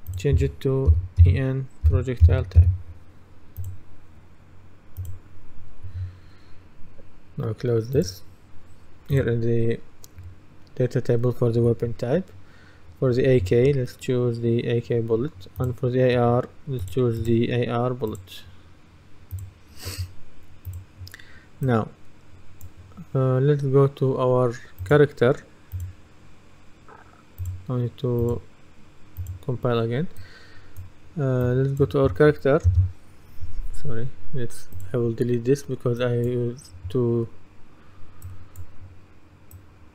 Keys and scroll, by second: 1.0-3.1 typing, 32.7 Delete.